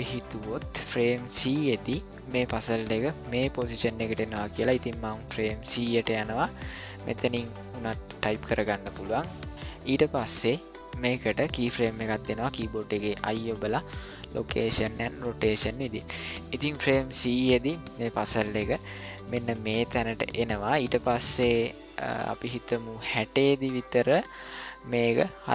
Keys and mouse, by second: 0.3 middle click, 5.6 click, 6.9-9.5 drag, 7.9 KP_0, 12.9 i, 21.7-24.2 drag.